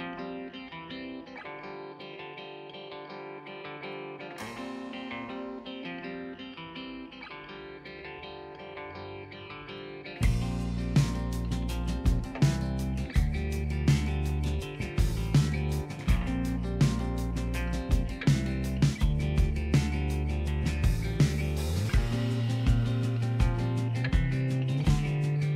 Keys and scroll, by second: 0.7 ctrl+alt+shift+e, 15.3 z, 20.0 z.